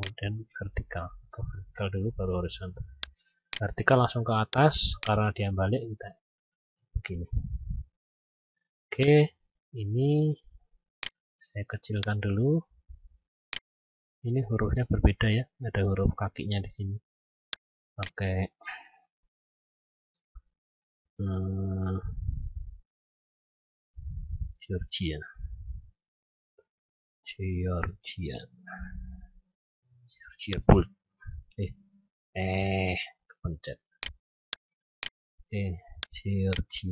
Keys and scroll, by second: 1.5 ctrl+z.